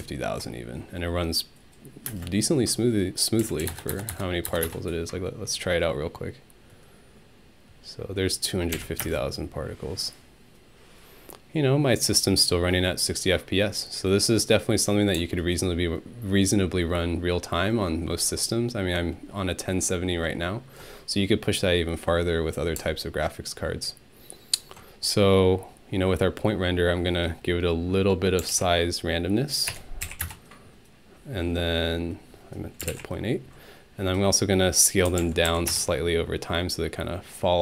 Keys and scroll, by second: 2.1 space, 3.2-5.0 typing, 8.7 Home, 9.0 space, 28.2-29.7 typing, 30.2 Return, 32.6-33.4 typing, 34.8-36.0 typing.